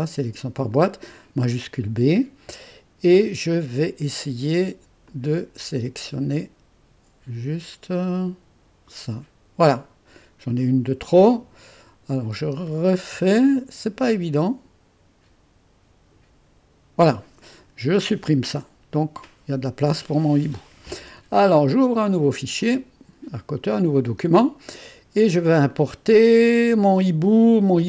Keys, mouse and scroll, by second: 1.1 click, 5.0-8.9 drag, 9.3 click, 13.0 shift+b, 14.4-16.8 drag, 17.9 Delete, 22.6 click, 24.8 click.